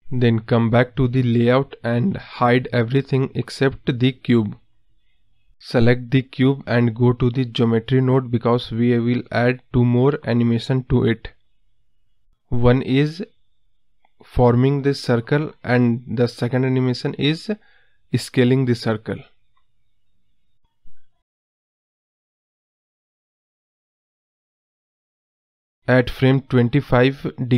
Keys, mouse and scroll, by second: 1.9 click, 2.3 scroll down 3, 2.6-3.8 middle drag, 3.8-5.5 scroll up 2, 5.5 click, 6.1 click, 6.7 click, 7.2 scroll up 2, 7.4-7.7 middle drag, 7.7-8.9 scroll down 2, 8.9-10.9 drag, 10.9 space, 12.8 space, 13.8 click, 15.0 click, 16.1-17.9 drag, 17.9 scroll up 1, 18.0-18.3 middle drag, 18.3 scroll down 1, 18.4-19.2 middle drag, 19.2 KP_0, 19.9-20.8 scroll down 2, 22.5 click, 23.4 ctrl+z, 24.9-26.1 drag, 26.8 click.